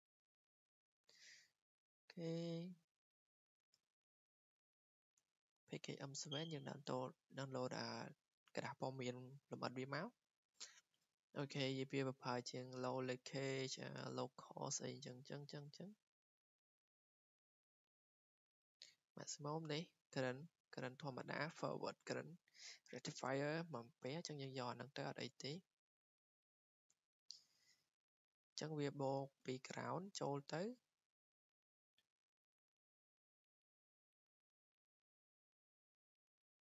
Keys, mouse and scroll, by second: 2.4 scroll down 2, 3.8 scroll down 1, 3.9-4.3 scroll, 4.7 click, 6.2 click, 6.2 scroll, 7.3 click, 12.9 click, 13.5 click, 14.9-17.7 scroll, 19.9 click, 20.6 click, 20.9-21.2 scroll down 11, 21.2 click, 23.8 click, 24.9 click, 26.8 click, 29.4 r, 30.2 r, 30.5 r, 31.9 typing.